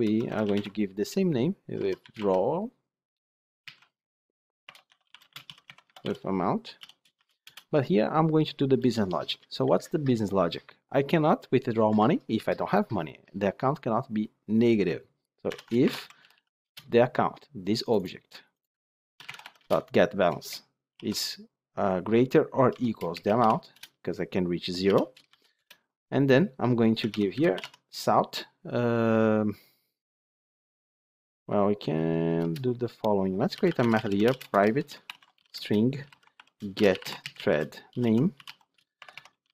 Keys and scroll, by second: 16.6 Return, 23.7 Return, 25.3 Return, 27.5 Tab.